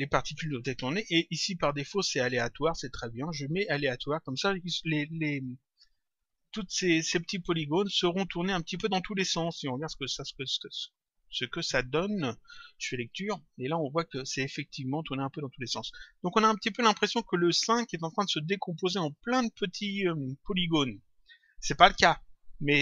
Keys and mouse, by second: 0.6 click, 3.5 click, 5.8 click, 8.6 click, 9.9 click, 12.8 click, 15.8 click.